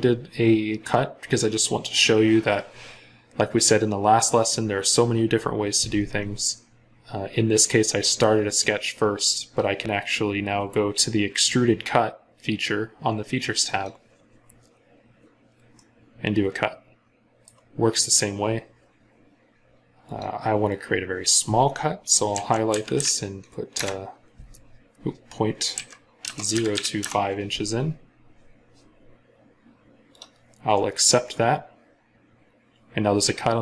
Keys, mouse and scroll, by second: 15.6 middle click, 22.1-22.8 typing, 23.6 Return, 25.6-26.8 typing, 26.8 Return.